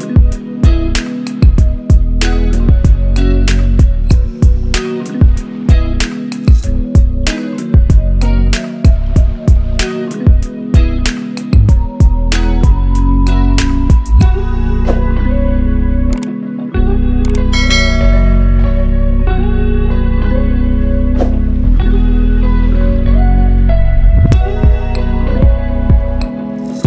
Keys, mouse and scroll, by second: 0.2 ctrl+v, 1.1-5.4 drag, 6.1-6.5 scroll up 1, 6.7 click, 9.2-9.5 shift+click, 11.6 click, 15.3 right click, 16.5 ctrl+Page_Down, 17.9-19.3 drag, 20.9 shift+click, 22.7 c, 23.7 click.